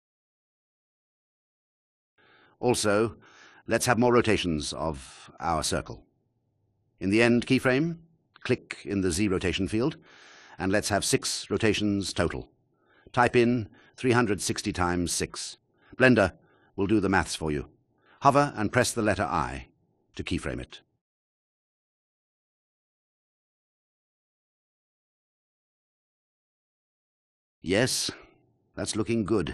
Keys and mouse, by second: 0.2 click, 7.8 click, 11.0 click, 11.8-16.7 drag, 23.6 i, 24.3 click, 24.7 space.